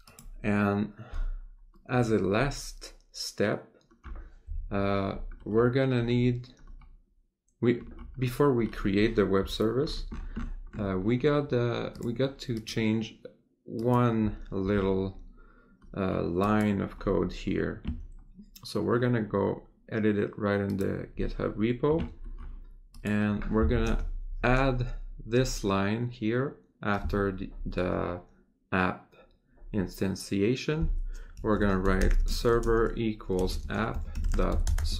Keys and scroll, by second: 32.2 space, 32.6 space.